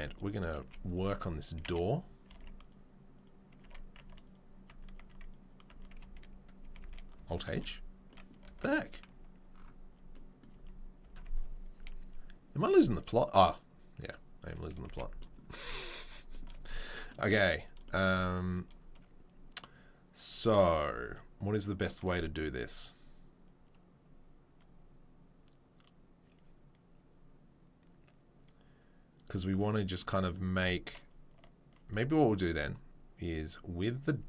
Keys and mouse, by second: 0.6 Tab, 0.6 z, 1.6 a, 2.3 Tab, 3.1 click, 3.6 Tab, 4.2 Tab, 4.2 click, 5.0 Tab, 6.0 Tab, 6.0 a, 6.6 a, 6.8 a, 7.5 alt+h, 8.4 1, 11.0 Tab, 14.0 click, 14.1-34.2 middle drag, 14.8 a, 17.3 z, 33.4 Tab, 33.4 click.